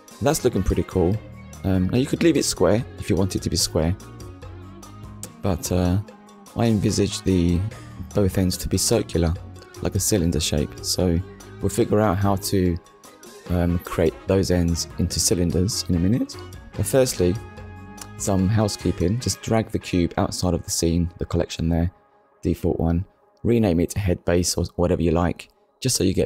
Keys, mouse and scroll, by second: 0.7 shift+middle click, 2.1 KP_1, 3.3 middle click, 5.6 KP_1, 8.5 scroll up 1, 9.6 ctrl+s, 10.9 shift+middle click, 12.4 click, 13.1 click, 14.4 click, 15.7 shift+h, 16.1 e, 16.7 d, 18.6 shift+b, 18.9 a, 20.7 Return, 23.7 click, 25.7 shift+middle click.